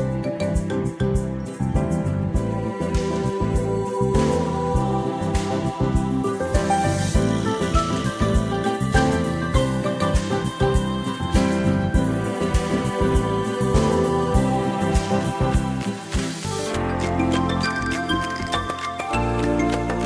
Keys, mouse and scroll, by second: 7.0 shift+click, 14.4 space, 18.9 click.